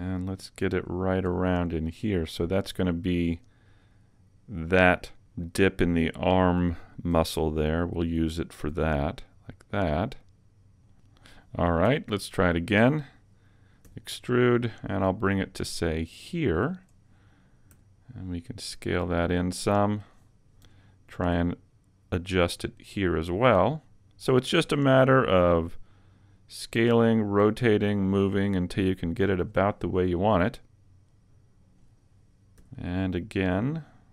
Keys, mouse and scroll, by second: 0.9 click, 1.3 g, 3.4 click, 7.2 r, 8.7 g, 10.6 click, 11.1 click, 12.4 alt+right click, 13.9 e, 16.8 click, 17.8 s, 20.0 click, 20.7 g, 23.6 click, 24.7 r, 26.9 click, 27.5 click, 27.5 g, 29.4 click, 32.6 e.